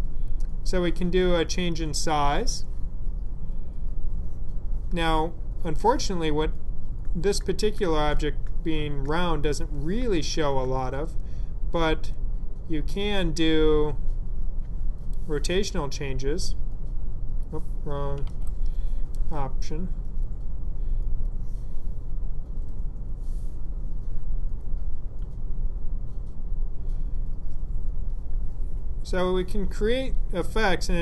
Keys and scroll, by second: 18.2 super+z.